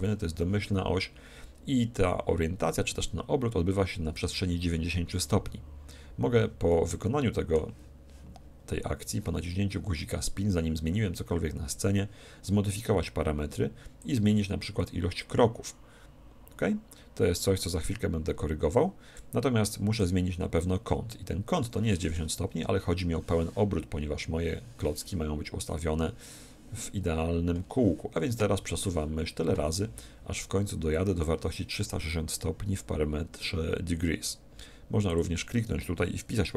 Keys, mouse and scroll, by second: 6.7-8.6 middle drag, 14.0-15.7 drag, 19.9-21.7 drag, 35.1-36.5 drag.